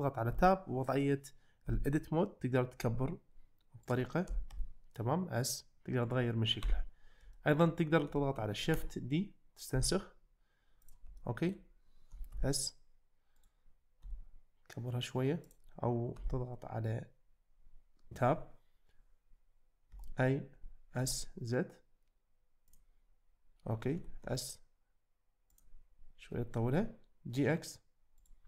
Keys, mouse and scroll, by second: 0.3 Tab, 1.7 a, 2.8 s, 4.3 s, 4.6 z, 6.7 Tab, 7.4 shift+middle click, 8.2 shift+middle click, 8.9 shift+d, 9.8 x, 11.2-11.5 shift+middle drag, 12.1 s, 12.3 z, 13.4 right click, 14.0 s, 16.2 Tab, 19.9 a, 20.6 s, 21.0 x, 24.0 s, 24.2 z, 25.5 click, 26.3 g.